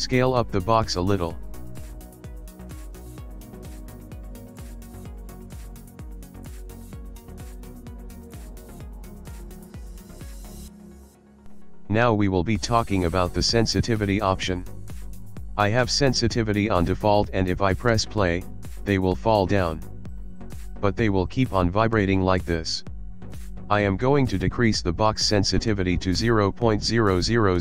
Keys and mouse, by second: 2.8 middle click, 3.3 middle click, 4.2 click, 4.6 middle click, 5.0 middle click, 5.1 click, 6.6 s, 10.0 middle click, 10.4 shift+middle click, 10.9 middle click, 11.5 middle click, 13.1 click, 17.1 click, 24.1 click, 25.3 click, 27.3 click.